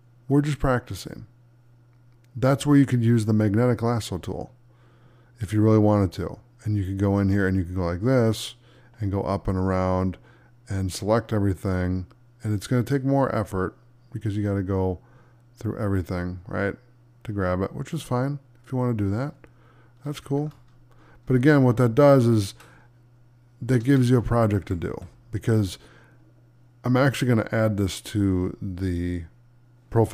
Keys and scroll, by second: 22.5 space, 24.9 space.